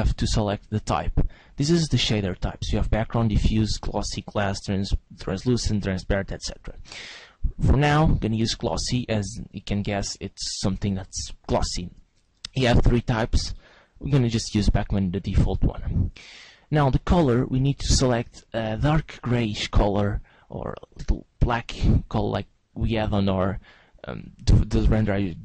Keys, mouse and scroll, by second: 0.9 click, 11.8 click, 16.9 click, 24.5 click.